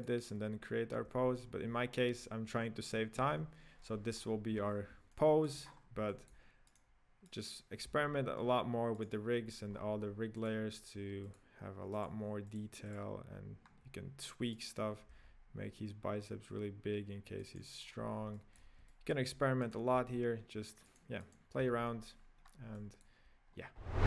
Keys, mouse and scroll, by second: 3.9-5.1 scroll down 8, 5.1-5.7 middle drag, 5.7-6.1 scroll up 6, 6.1-6.7 shift+middle drag, 6.7 right click, 7.4 right click, 7.9 g, 9.7-10.5 scroll down 7, 10.5 click, 11.4 click, 12.1 click, 12.6-13.1 drag, 14.7 right click, 15.2 s, 17.8 scroll up 3, 18.3-19.8 shift+middle drag, 19.8 right click, 20.1 s, 21.5 right click, 21.8 y, 22.4-22.8 scroll down 3, 22.8-23.4 middle drag, 23.4 scroll down 3.